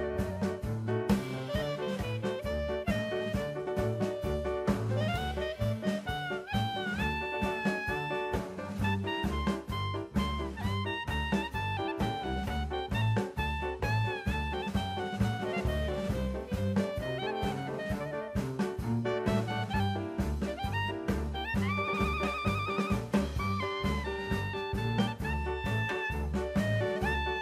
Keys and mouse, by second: 2.3 click, 4.3 click, 4.9-7.3 drag, 7.8 click, 10.7 click, 11.2-13.9 middle drag, 14.2 middle click, 15.4 click, 19.9-20.3 middle drag, 20.7 click, 22.5 middle click, 23.1 middle click, 24.3 click.